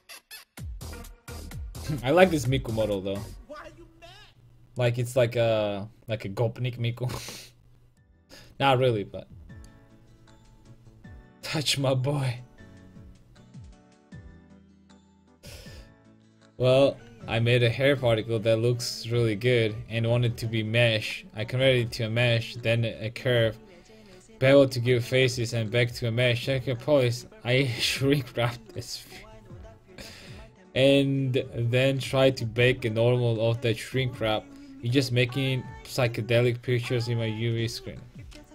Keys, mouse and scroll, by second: 0.0-38.5 drag.